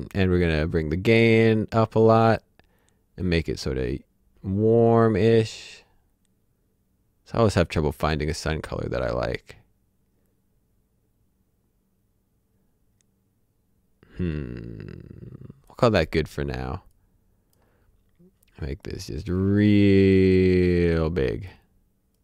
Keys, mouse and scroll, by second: 0.3 click.